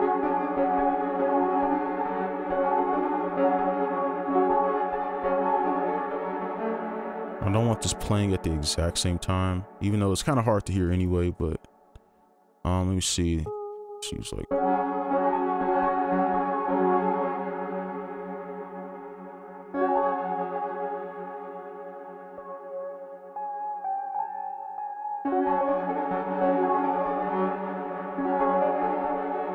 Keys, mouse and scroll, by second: 0.3 space, 6.8 space, 7.1 ctrl+click, 8.2 alt+click, 10.8 right click, 14.1 ctrl+click, 14.8 space, 15.0 ctrl+Up, 15.3 space, 15.5 ctrl+Up, 15.6 space, 15.8 space, 17.6 right click, 18.7 alt+click, 19.5 right click, 20.0 space, 25.2 space, 26.6 space, 26.7 alt+click, 28.1 space.